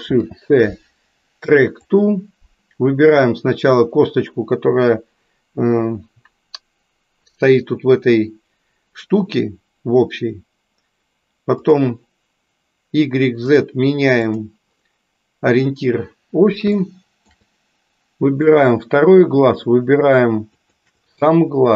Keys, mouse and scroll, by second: 2.1 ctrl+shift+c, 13.5 click, 14.2 click, 16.9 shift+middle click, 18.5 click.